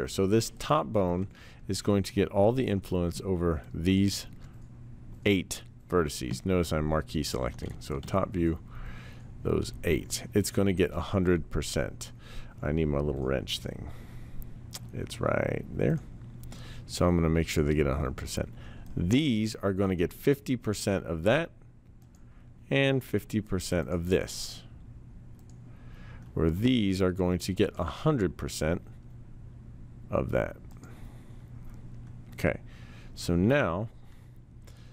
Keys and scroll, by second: 8.0 t.